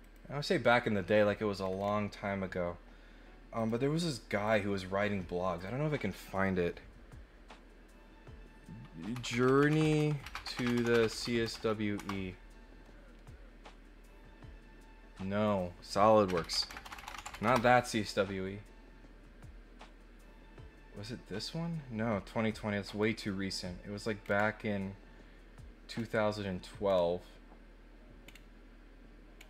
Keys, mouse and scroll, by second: 3.5 click, 4.4 click, 5.5 click, 15.4 click, 22.8 middle click, 23.0 middle click, 24.2 middle click, 25.9 middle click, 26.8 middle click, 26.8 scroll down 2, 28.2 middle click, 28.2 scroll down 2, 29.3 middle click, 29.3 scroll down 2.